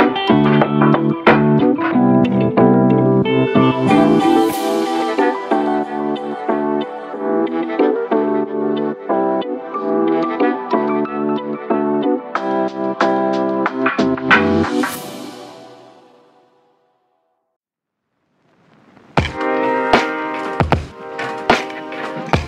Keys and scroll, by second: 2.5 ctrl+d, 17.9-18.7 typing.